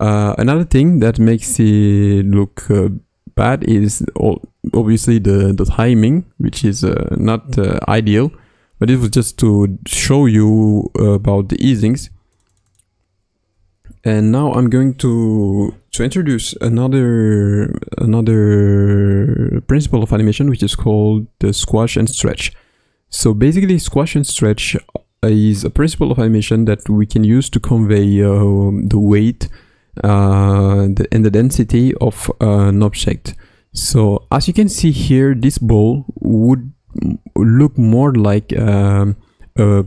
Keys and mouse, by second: 11.9 space, 12.5 click, 35.4 click, 36.8 space, 39.7 space.